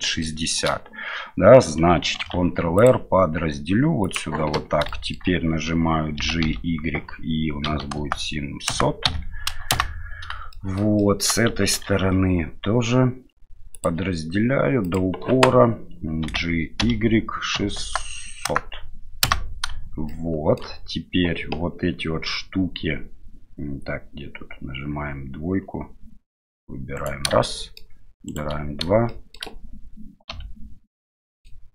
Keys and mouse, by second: 0.0 shift+middle click, 0.3 shift+middle click, 2.2 ctrl+r, 5.0 middle click, 6.2 g, 10.6 shift+middle click, 11.1 shift+middle click, 11.8 ctrl+r, 16.2 g, 20.1 shift+middle click, 26.3 2, 27.0 right click, 27.4 middle click, 28.3 right click, 29.1 shift+middle click, 30.3 KP_Divide, 31.1 middle click.